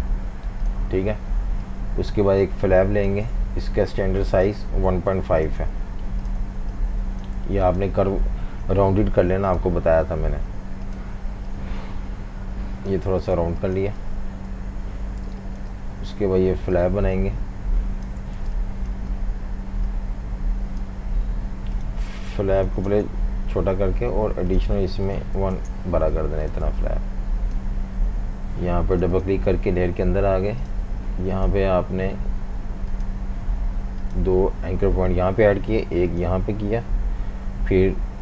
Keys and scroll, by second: 0.0-0.2 typing, 4.6-8.5 typing, 13.4 typing, 14.6 super+-, 14.7 super+-, 15.3 typing, 18.4 v, 19.0 space, 22.2-23.2 typing, 25.4-26.7 typing, 28.0 v, 37.2 a.